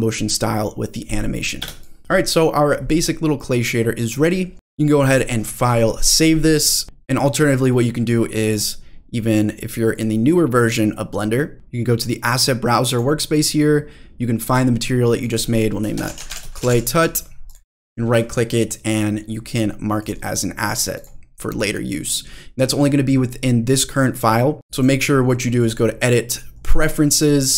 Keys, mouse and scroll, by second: 1.6 space, 1.8 drag, 2.0 middle click, 2.0 scroll down 1, 3.4-4.0 drag, 6.8 click, 8.5 click, 9.9-13.0 drag, 15.2 click, 15.3-17.5 drag, 16.7 t, 17.7-18.4 right drag, 18.4-20.1 drag, 21.0 drag, 24.7 click, 24.8 click, 25.6 click, 26.6-27.3 drag.